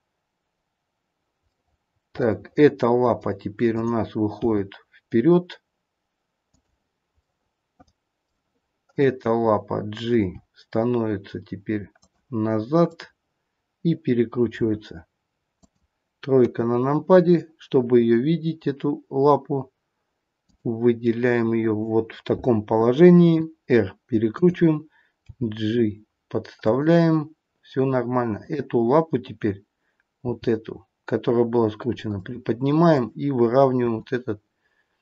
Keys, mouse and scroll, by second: 1.5 middle click, 2.3 middle click, 3.7 click, 4.8 g, 7.1 middle click, 8.8 click, 10.1 g, 12.8 click, 14.6 r, 16.3 KP_3, 20.3 click, 23.2 r, 25.3 g, 28.3 click, 30.1 g, 32.9 click, 34.1 r.